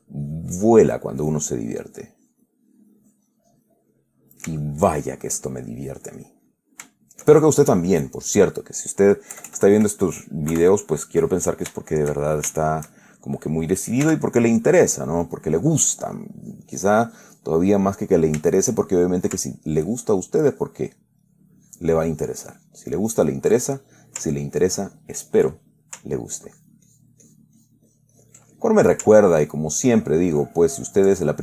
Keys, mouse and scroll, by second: 1.7 click, 2.5 click, 4.2-4.9 middle drag, 4.9 shift+middle click, 5.7 middle click, 7.3-8.0 shift+middle drag, 8.3 shift+click, 9.6 KP_Add, 10.8 KP_Add, 11.1 middle click, 11.3 click, 12.1-14.2 shift+drag, 14.4 shift+f, 15.0 click, 15.8 click, 16.3-18.0 drag, 18.0-19.7 middle drag, 20.0 ctrl+click, 20.8 ctrl+click, 21.5-23.9 ctrl+drag, 23.9-24.5 ctrl+middle drag, 24.7-25.8 ctrl+drag, 25.8-26.3 ctrl+middle drag, 26.8-28.7 ctrl+drag, 28.8-29.2 ctrl+middle drag, 29.6 ctrl+click.